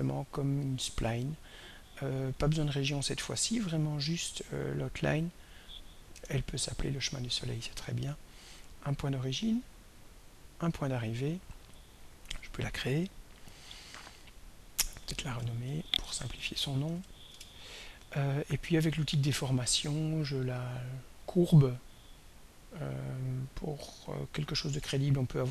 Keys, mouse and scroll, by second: 0.4 click, 2.6 click, 3.0 click, 5.2 click, 6.1 BackSpace, 8.3 click, 10.2 click, 13.0 click, 14.3 click, 15.4 End, 16.3 ctrl+BackSpace, 16.9 ctrl+BackSpace, 17.3 Return, 18.6 click, 20.5 click, 21.8-25.5 drag.